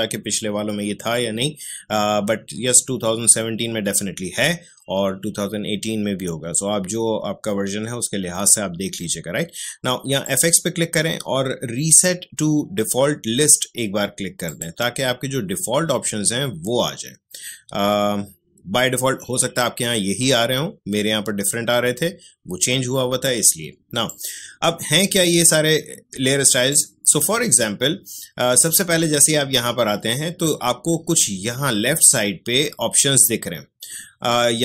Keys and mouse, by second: 10.2 click, 14.4 click, 24.0-34.6 drag.